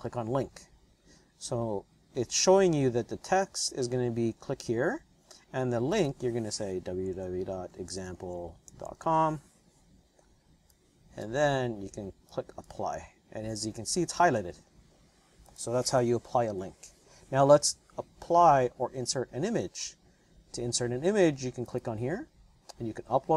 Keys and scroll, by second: 6.0-9.6 typing, 16.3 Return, 16.5 Return.